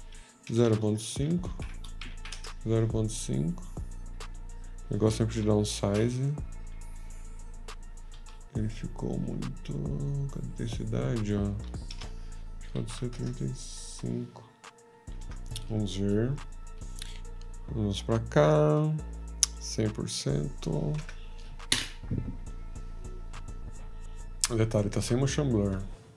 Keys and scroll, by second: 20.5 F13, 21.0 0.